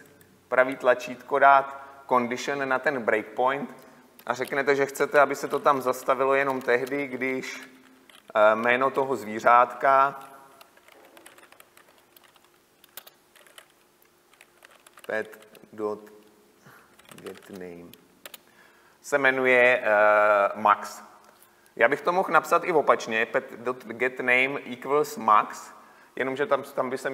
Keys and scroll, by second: 13.2 Return, 18.4 Return.